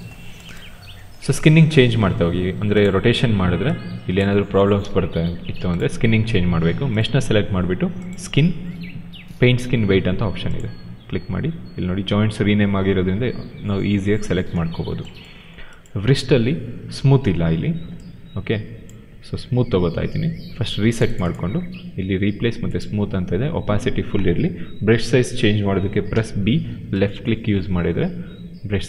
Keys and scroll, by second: 4.7 ctrl+z.